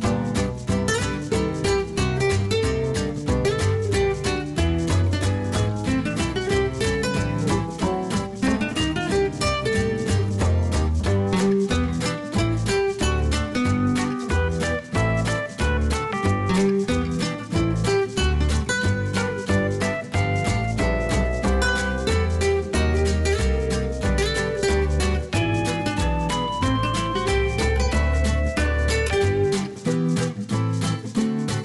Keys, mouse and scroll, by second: 1.3 click, 4.7-21.3 drag, 19.2-21.3 scroll up 1, 23.7 ctrl+d.